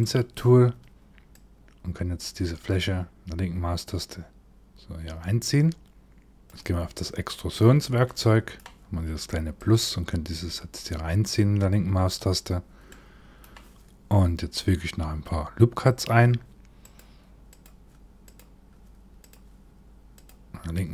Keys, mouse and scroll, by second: 0.9 click, 6.5 click, 7.6 middle click, 9.1 click, 12.5 middle click, 15.4 click, 16.4 click, 17.1 click, 17.9 click, 18.8 click.